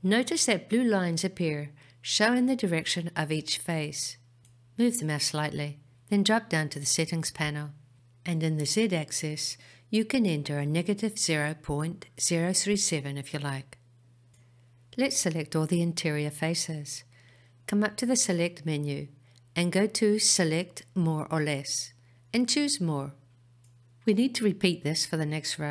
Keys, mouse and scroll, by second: 12.0-16.0 drag, 18.2-21.5 middle drag, 23.2-25.7 drag.